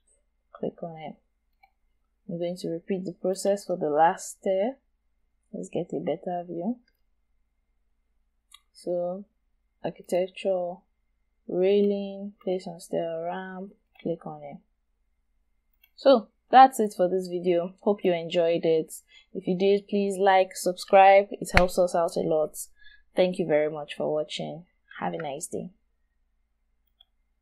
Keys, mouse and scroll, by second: 1.9 scroll down 1, 2.2-3.4 scroll up 1, 4.1 shift+right click, 7.2-7.5 scroll down 1, 7.5 scroll up 1, 16.0 scroll down 1, 16.7 shift+right click, 18.3-18.7 shift+scroll down 2, 18.7 scroll up 1, 19.1 shift+right click.